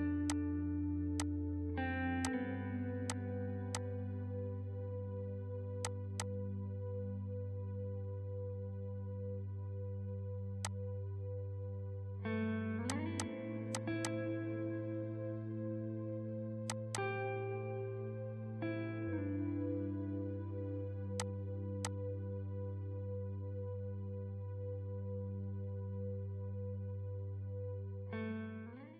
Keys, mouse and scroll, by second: 9.9 ctrl+r, 10.6 click, 10.9 r, 12.8 click, 13.6 F3, 13.7-18.1 drag, 18.1 shift+F2, 19.3 ctrl+g, 20.9 scroll down 1, 21.2 click, 21.6 F2, 21.8-24.1 drag.